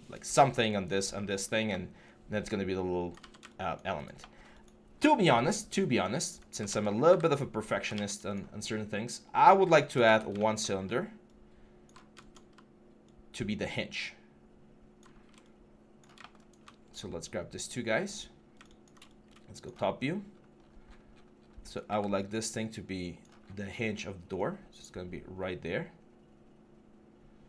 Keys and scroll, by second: 3.0 ctrl+z, 6.5 ctrl+z, 6.9 w, 7.7 ctrl+z, 9.9-14.8 typing, 21.7 w.